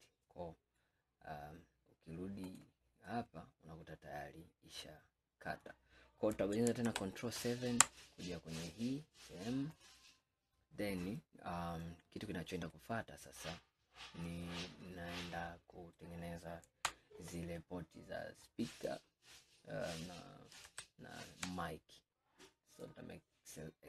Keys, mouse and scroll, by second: 2.5-3.2 drag, 3.2-6.3 middle drag, 6.9 ctrl+KP_7, 8.1 scroll up 2, 9.8 click, 10.4-11.0 scroll down 3, 11.6 scroll down 1, 11.6-12.8 scroll up 1, 12.8-15.9 middle drag, 18.8 click, 20.7 ctrl+KP_7, 22.8-23.8 drag.